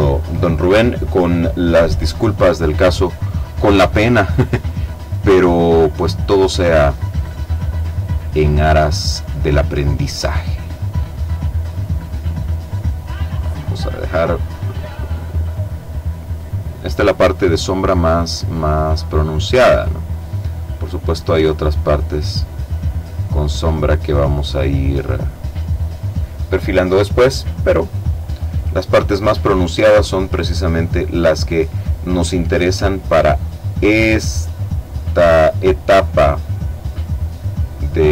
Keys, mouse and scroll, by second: 0.4 click, 2.8 click, 4.2 click, 5.2 click, 6.5 click, 8.6 click, 10.0 click, 11.1 click, 12.5 click, 13.8 click, 14.8 click, 16.4-17.6 drag, 17.8-18.7 drag, 19.8 click, 20.9 click, 22.4-24.1 drag, 24.5 click, 26.6-27.8 middle drag, 28.9 click, 30.1 click, 31.1-32.3 drag, 32.5 click, 34.0 click, 35.5-36.6 drag, 37.0 click.